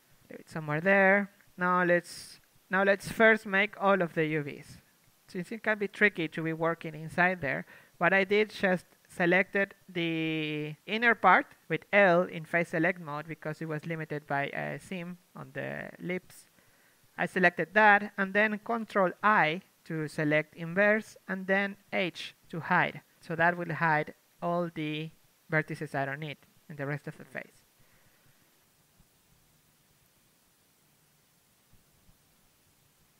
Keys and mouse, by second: 0.3 ctrl+l, 0.6 ctrl+l, 1.8-6.8 typing, 2.6-4.1 drag, 4.3 Tab, 5.6 middle click, 6.1-7.6 drag, 6.5 Tab, 7.6 ctrl+Tab, 7.8 middle click, 7.8 z, 9.0 ctrl+Tab, 9.3 z, 9.5 l, 10.0 z, 10.4 z, 11.4 ctrl+i, 13.6 h, 16.6 ctrl+Tab, 17.9 ctrl+Tab, 18.3 l, 18.8 u, 20.6 z, 21.4 z, 22.3 ctrl+Tab, 23.4 z, 24.4 z, 24.7 z, 25.6-27.1 drag, 27.1 ctrl+e, 27.1-30.7 typing, 32.1 c.